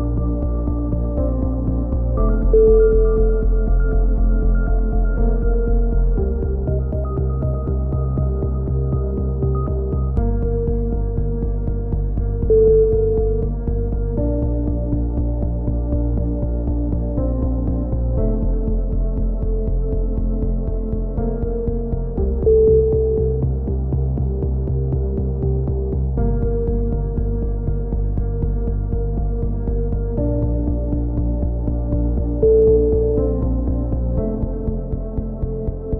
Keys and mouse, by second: 0.0-0.3 typing, 2.7 a, 2.9 KP_1, 4.0-7.2 typing, 7.5-8.3 drag, 8.3-8.8 right drag, 8.8 KP_3, 8.9 right click, 9.1 z, 10.5-11.2 drag, 11.2 z, 11.5 z, 11.9 a, 12.0 z, 12.2 click, 12.9 click, 13.0-13.4 right drag, 13.4-13.9 middle drag, 15.2-15.6 right drag, 15.2 KP_3, 15.4 z, 15.6-16.1 drag, 16.1 right click, 17.5 c, 18.2-19.4 drag, 18.2 right click, 19.4 a, 19.6 z, 19.8-20.4 drag, 21.4 middle click, 21.6-25.7 typing, 26.2 ctrl+z, 27.2 right click, 27.8 a, 27.8 z, 28.1 Tab, 32.0 KP_7, 32.2 Tab, 32.3 z.